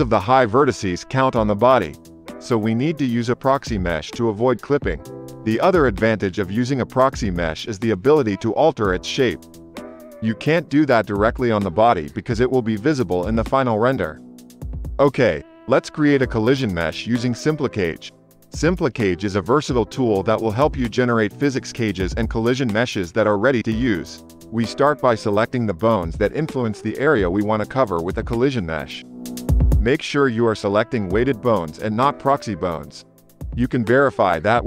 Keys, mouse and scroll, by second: 2.0 KP_0, 9.2 space, 9.7 shift+Left, 13.3 click, 14.6 ctrl+Tab, 16.0 shift+Left, 16.0-18.3 drag, 18.7 click, 21.1-28.3 drag, 22.4 ctrl+Tab, 28.8 shift+click, 30.1 shift+click, 31.9-34.6 shift+drag.